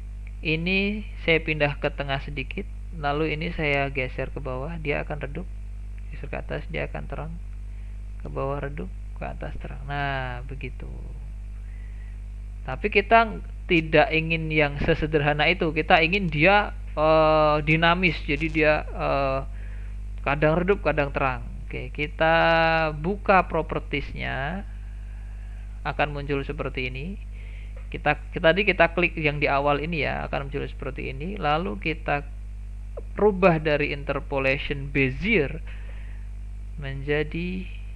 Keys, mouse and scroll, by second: 1.3-7.1 drag, 24.3-27.3 drag, 29.6 click, 35.0-37.9 drag.